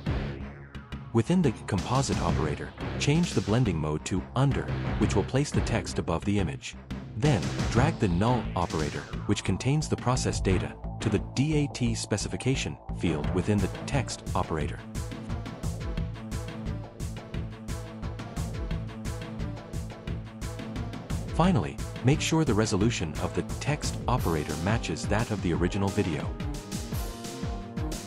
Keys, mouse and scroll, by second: 0.7 click, 2.5 click, 14.5 click, 19.0 click, 20.3 click, 25.0 ctrl+v, 26.1 Return, 26.6 click, 27.4 BackSpace.